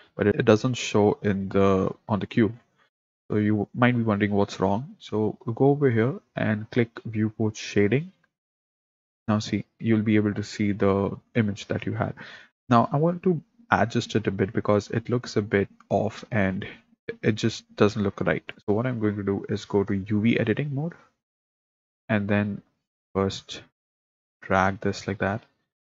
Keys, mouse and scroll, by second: 8.2 click, 21.0 click, 23.7-25.8 drag.